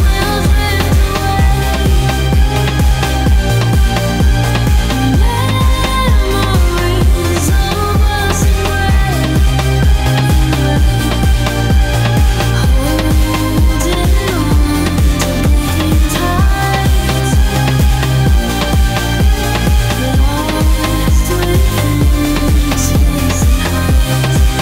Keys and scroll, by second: 22.8 ctrl+z, 23.8 ctrl+z.